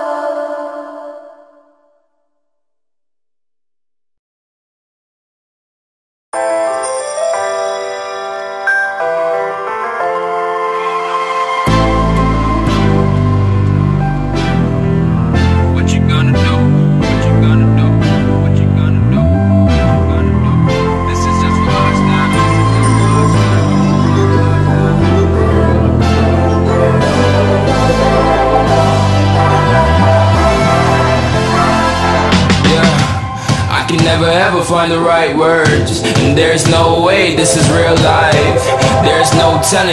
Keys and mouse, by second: 6.4 click, 9.3-10.1 drag, 12.8 ctrl+click, 16.0-17.2 drag, 19.1 ctrl+click, 20.1 ctrl+click, 22.5-23.2 drag, 27.4 space, 27.6 click, 27.8 space, 35.9 click, 36.4 ctrl+=, 36.7 space, 36.8 click, 37.0 space, 38.0 click.